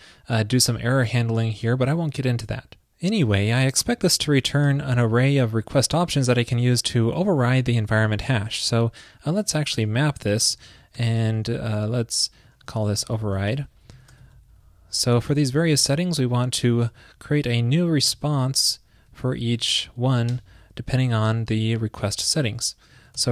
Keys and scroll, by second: 4.7 super+Right, 14.0 super+Left, 16.8 super+], 18.3 super+], 18.3 alt+Right, 19.5 alt+shift+Right, 21.7 super+Right, 22.6 super+Right.